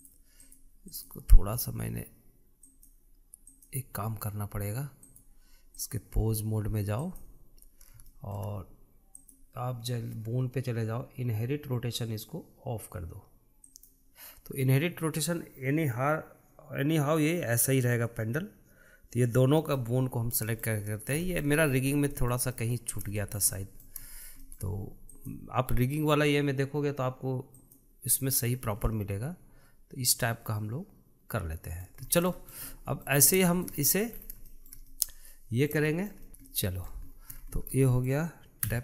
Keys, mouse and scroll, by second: 0.8-3.6 drag, 4.3 click, 5.8-7.9 drag, 8.9-9.9 shift+middle drag, 9.9 click, 11.7-14.5 scroll down 1, 14.5 click, 20.5-21.6 middle drag, 21.6-22.0 scroll down 2, 22.0-22.7 shift+middle drag, 22.7 scroll up 1, 22.9-23.8 shift+middle drag, 23.8 scroll up 1, 23.9-25.9 shift+middle drag, 25.9 click, 28.4 click, 29.3-29.6 scroll down 2, 29.6-32.8 middle drag, 32.8-33.1 scroll down 1, 33.1-34.0 shift+middle drag, 34.0 scroll down 1, 34.3-34.9 shift+middle drag, 34.9-35.3 scroll up 3, 35.3-36.6 shift+middle drag, 36.6-37.0 scroll down 2, 37.0-37.9 shift+middle drag, 37.9-38.4 scroll down 5, 38.4-38.8 shift+middle drag.